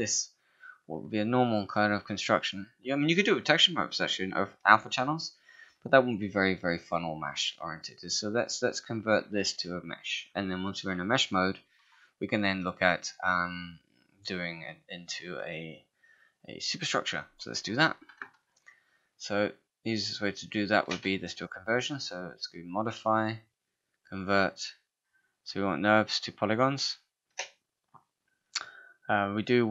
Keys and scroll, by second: 18.3 space.